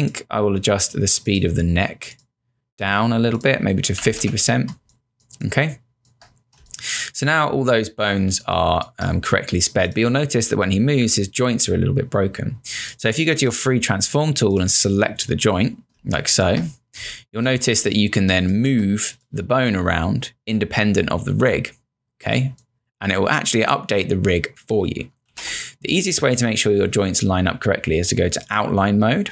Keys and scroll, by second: 3.8-4.8 typing, 6.2 space, 16.0 space, 25.3 z.